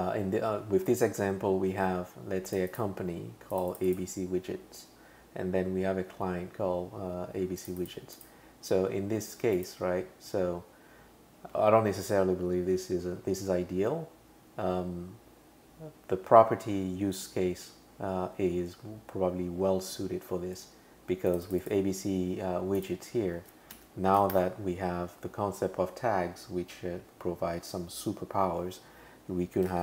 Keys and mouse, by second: 2.5 click, 2.7 click, 3.5 click, 3.7 click, 3.9 click, 7.6 click, 7.8 click, 8.2 click, 9.6 click, 11.6 super+[, 21.3 click, 21.5 click, 21.6 click, 23.7 space, 24.3 shift+3, 29.6-29.8 typing.